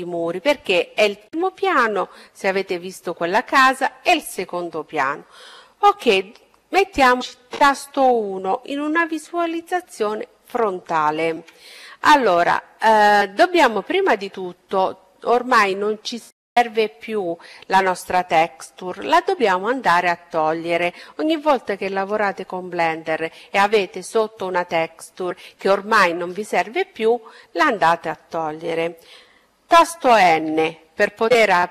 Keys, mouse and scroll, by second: 9.2 KP_1, 13.7-16.9 middle drag, 16.9 KP_1, 28.2 n.